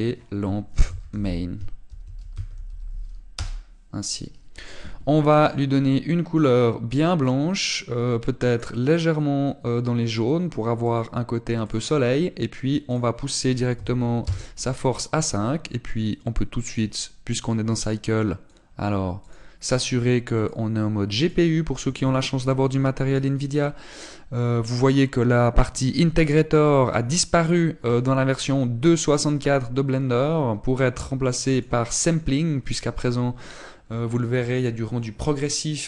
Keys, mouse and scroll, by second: 7.3 click, 10.9 click, 15.1 click, 16.1 middle click, 17.5 click, 20.6 click, 22.1 click, 28.8 click.